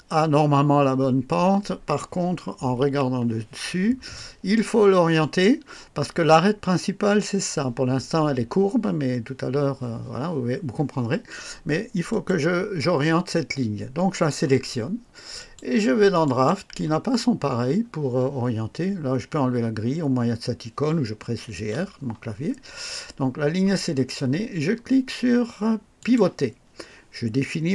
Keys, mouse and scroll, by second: 2.8 KP_2, 3.6 scroll up 1, 4.1-4.8 right drag, 5.0-5.5 scroll up 2, 12.1 click, 15.4 click, 16.2 click, 17.4 scroll up 1, 21.2-22.1 typing, 26.0 click.